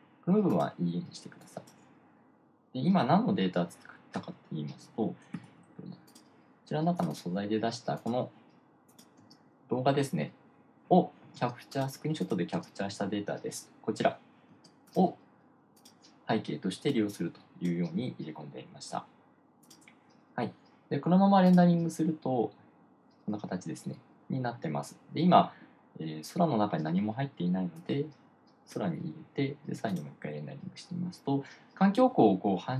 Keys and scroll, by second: 14.9 space.